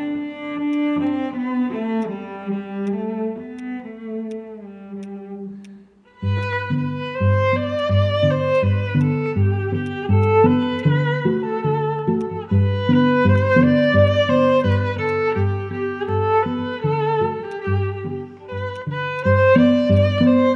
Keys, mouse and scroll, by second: 6.4 alt+click, 10.2 alt+click, 10.7 alt+click, 11.7 alt+middle click, 11.9 scroll down 1, 12.2 alt+click, 18.8 right click.